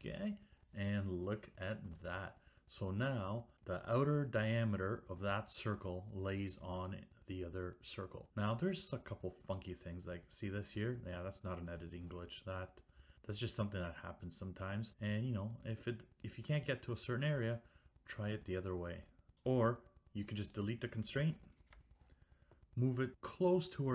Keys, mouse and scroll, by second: 2.1 Escape, 20.6 click, 21.7 Delete.